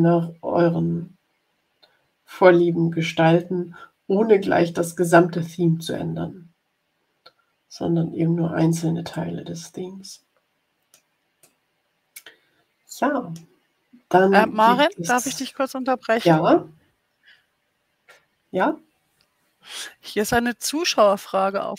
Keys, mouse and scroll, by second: 9.0 click, 9.8 middle click, 10.1 click, 10.2 middle click, 10.5 click, 10.6 middle click, 10.8 click, 11.4-13.5 drag.